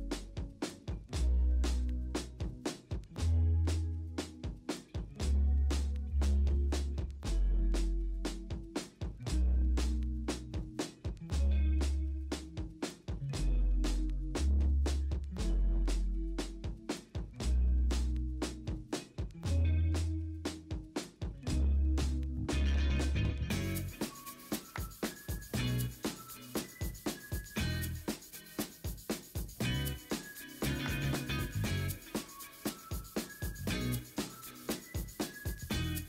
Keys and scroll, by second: 0.1 l, 1.1 typing, 2.7 4, 3.4 0, 3.8 x, 4.3 x, 4.5 ctrl+d, 5.5 b, 10.6 ctrl+t, 11.6 v, 14.0 ctrl+t, 14.0 v, 22.6 ctrl+t, 25.3 Escape, 26.1 m, 27.9 ctrl+t, 29.9 ctrl+t, 31.0 ctrl+t, 34.0 typing, 35.5 ctrl+t.